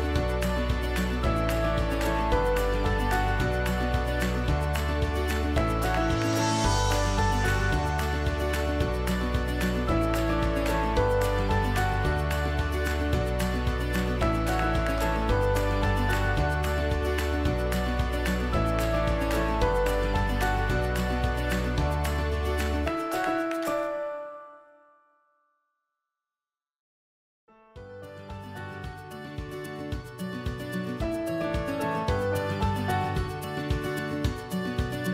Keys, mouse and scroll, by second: 27.7-35.1 alt+drag.